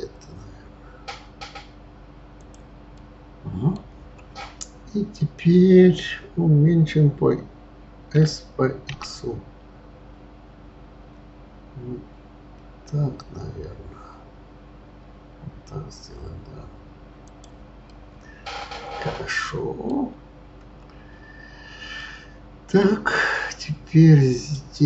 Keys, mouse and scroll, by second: 3.0-6.0 middle drag, 8.1 s, 17.8-20.9 middle drag, 21.9-24.3 middle drag, 24.3 click.